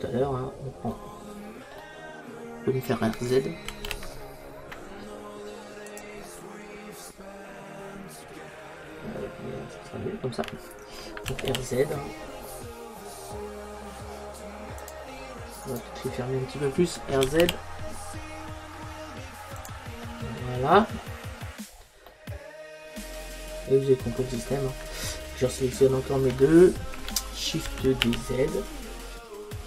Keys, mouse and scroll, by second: 3.7 r, 6.1 click, 7.8-9.0 middle drag, 11.4 r, 15.0 click, 17.3 r, 19.7 click, 21.6-24.1 middle drag, 25.7-27.7 right drag, 27.7 shift+d.